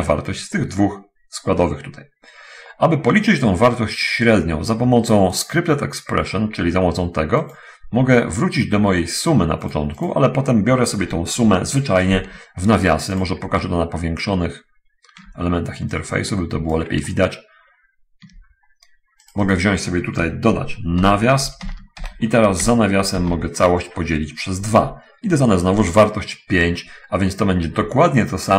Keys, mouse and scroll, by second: 5.8 click, 7.5 click, 10.1 click, 10.4 middle click, 13.6-15.7 ctrl+middle drag, 16.4 click, 17.4 ctrl+middle click, 18.8 ctrl+scroll down 1, 19.1 ctrl+middle click, 19.5 click, 21.0 shift+0, 22.4 Home, 22.4 9, 22.6 End, 23.6 /, 23.7 2, 25.2 Return.